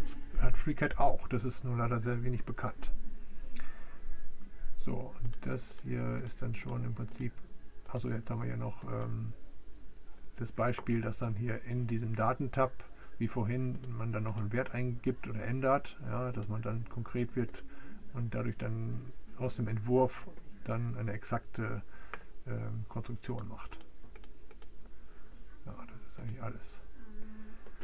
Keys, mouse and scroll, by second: 5.4 right click, 5.9 click, 6.1-6.9 typing, 9.0-14.0 drag, 14.0 typing, 16.5-17.5 typing, 17.3 Return, 19.2 typing, 23.4 click, 24.3 typing, 24.7-26.3 right drag, 26.3-27.8 drag.